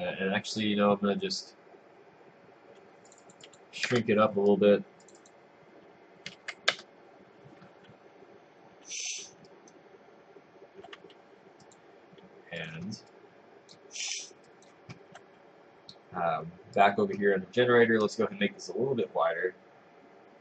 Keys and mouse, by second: 3.9 Return, 6.8 Return, 8.8 w, 9.5 right click, 11.0 w, 11.7 click, 12.8 click, 13.1 click, 14.5 click.